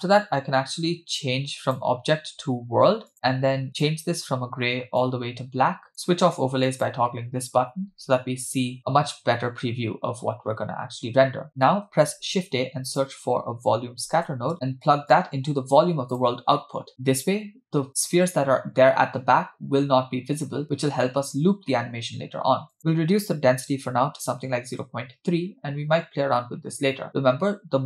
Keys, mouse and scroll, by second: 1.7-3.1 drag, 3.1 middle click, 3.7 click, 6.8 click, 11.5-11.9 scroll up 1, 12.2 shift+a, 15.1-16.5 drag, 20.6 scroll down 1, 21.7 middle click, 22.1 scroll up 2, 22.7-24.9 drag, 27.2-27.8 scroll up 2.